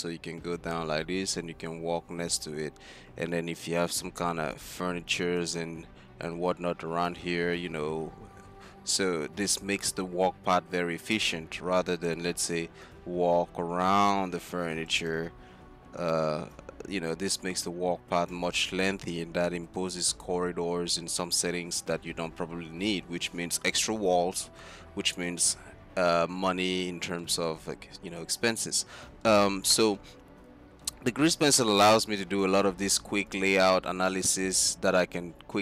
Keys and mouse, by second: 3.7-5.5 d, 7.2 d, 7.4 d, 7.5-8.4 d, 12.2-18.8 d, 16.6-18.6 drag, 19.6-20.5 drag, 26.4-27.6 middle drag, 28.3-29.3 middle drag, 32.6-33.4 d, 34.6 d, 35.3 click.